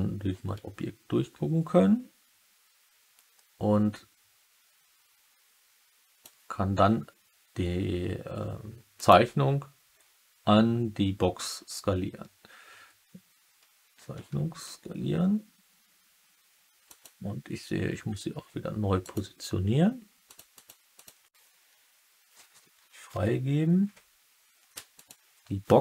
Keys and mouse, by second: 8.9 click, 14.4 s, 16.8 click, 20.2 click, 20.5 click, 20.9 click, 24.9 click.